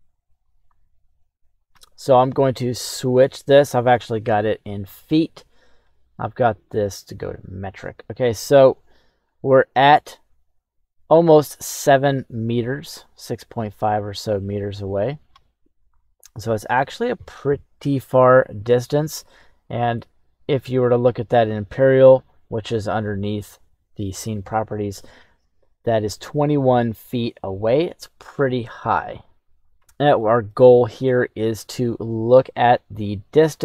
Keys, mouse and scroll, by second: 5.7-6.6 drag, 8.3-15.3 drag, 15.9-16.7 middle drag, 19.5-21.0 drag, 30.5-31.5 middle drag, 33.2 KP_1.